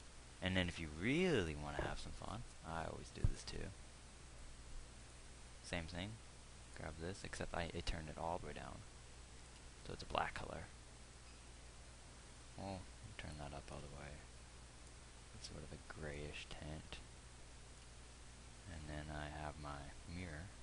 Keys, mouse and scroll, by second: 0.0 Escape, 8.3 click.